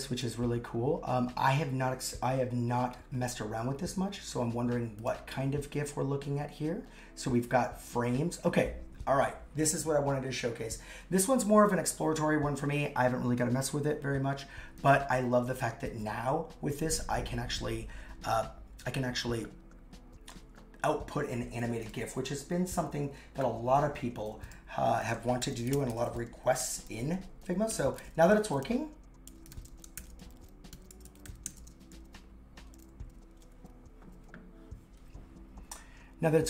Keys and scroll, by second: 23.8 super+c, 25.2-26.6 typing, 28.4 shift+i, 30.0 shift+c, 31.5 shift+;, 31.6 shift+space, 31.9 super+v.